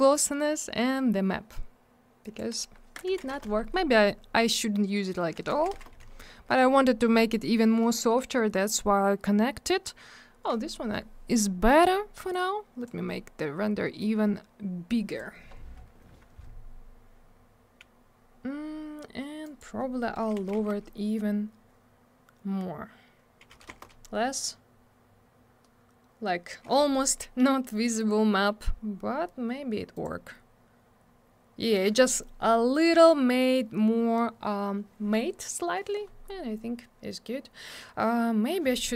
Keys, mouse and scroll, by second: 2.2 click, 2.3 click, 3.1 6, 3.3 Return, 5.5 3, 5.7 Return, 12.3 click, 14.0 click, 19.4 click, 19.6 click, 20.3 2, 20.6 Return, 23.7 Return, 27.9-28.6 scroll up 1, 29.9 click, 30.0 click, 32.7 click, 32.8 click, 36.4 scroll down 1.